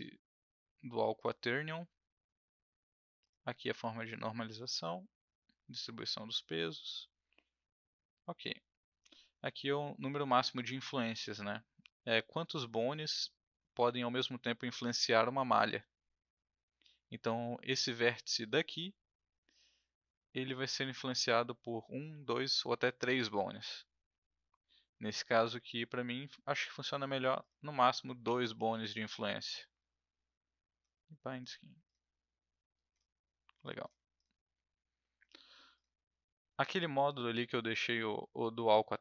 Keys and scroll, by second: 28.2 F1, 28.7 2.